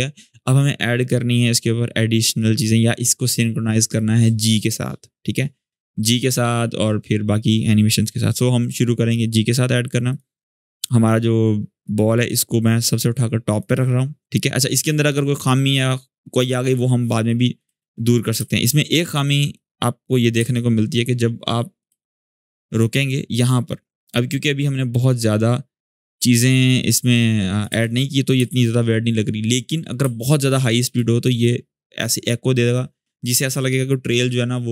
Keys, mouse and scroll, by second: 9.8-13.4 drag, 19.3-19.9 click, 20.1 space, 20.9-21.8 click, 21.6 space, 23.6-27.4 drag, 27.4 space, 28.8-29.8 scroll up 1, 29.8 space, 30.0 click, 30.3-30.6 space.